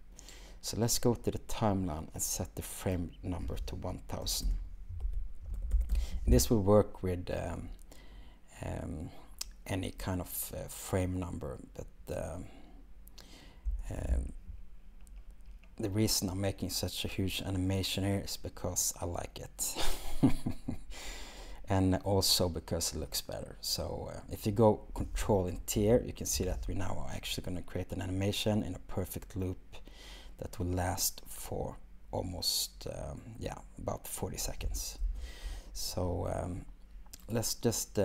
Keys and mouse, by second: 3.0-13.7 drag.